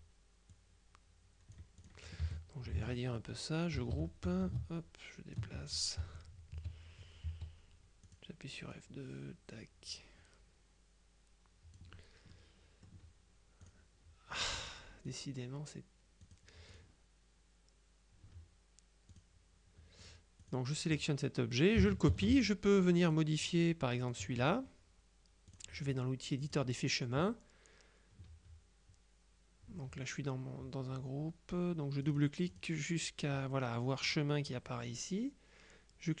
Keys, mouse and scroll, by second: 0.6-2.4 drag, 2.3 F1, 3.9 ctrl+g, 4.3-5.9 ctrl+drag, 6.1 F2, 7.3 F2, 8.1 click, 8.8-12.3 drag, 12.4-13.4 drag, 13.7 click, 15.1 click, 16.3-17.3 drag, 19.2 click, 20.1 click, 22.2 ctrl+c, 23.1 click, 24.1 click, 25.6 click, 26.5 click, 32.1 click.